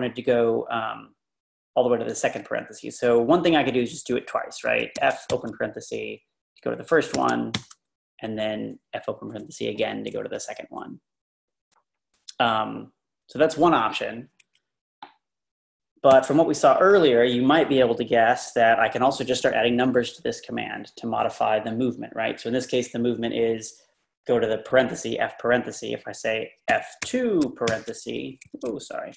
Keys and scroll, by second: 4.9-5.8 typing, 7.1-7.5 typing, 16.1 0, 26.5-27.7 typing, 28.5 Escape.